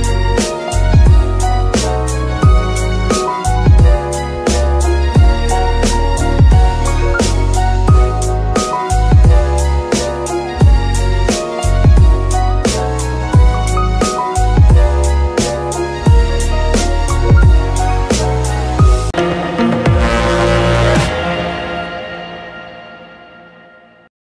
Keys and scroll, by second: 1.8 shift+r, 3.3 Escape, 3.9 alt+g, 4.0 r, 4.8 g, 6.7 Escape, 12.3 g, 18.4 Escape.